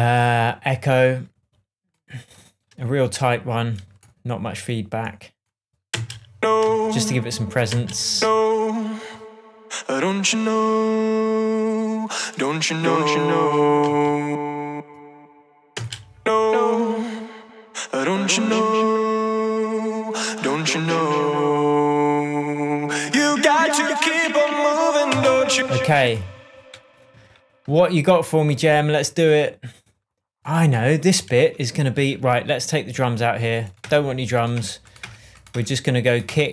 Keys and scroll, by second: 6.3 space, 14.2 space, 16.1 space, 25.5 space, 27.5 Tab, 34.2 BackSpace.